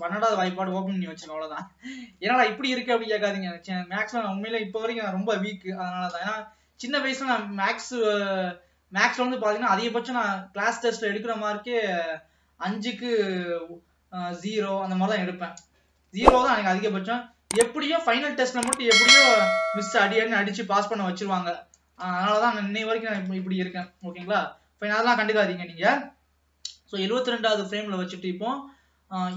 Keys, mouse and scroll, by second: 0.8 ctrl+s, 2.7 middle click, 3.4 scroll up 2, 4.9 ctrl+s, 5.7 KP_3, 6.3-7.0 scroll up 2, 7.0 ctrl+s, 9.4-10.0 scroll down 1, 15.7-16.4 scroll up 1, 16.4 ctrl+s, 17.1 ctrl+s, 22.7 ctrl+s, 23.4-24.8 scroll down 2.